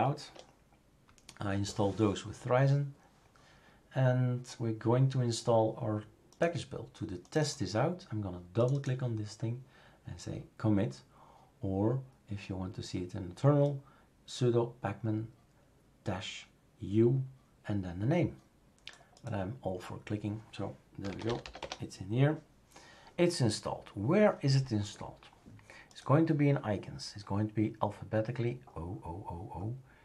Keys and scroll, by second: 20.8-21.9 typing.